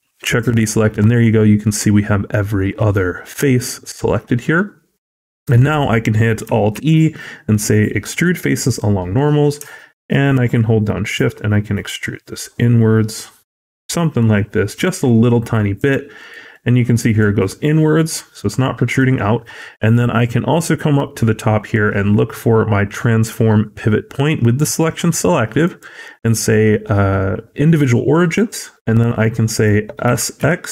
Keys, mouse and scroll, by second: 0.7 scroll down 1, 1.0 middle click, 2.9-4.4 scroll up 2, 4.6-4.9 scroll down 1, 4.9 middle click, 6.6 alt+e, 16.3 scroll down 1, 16.4 middle click, 17.1-17.9 scroll up 2, 17.9 scroll down 1, 18.2 middle click, 25.5 click, 28.7 middle click, 29.9 s.